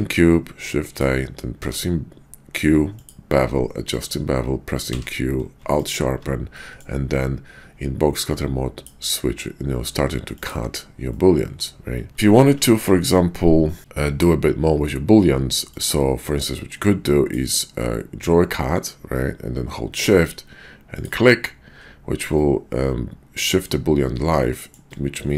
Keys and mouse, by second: 1.6 q, 4.8 q, 6.6 middle click, 10.5 right click, 11.1-12.1 middle drag, 12.1 ctrl+z, 15.7-21.0 drag, 22.4-24.7 middle drag, 25.2-25.3 middle drag.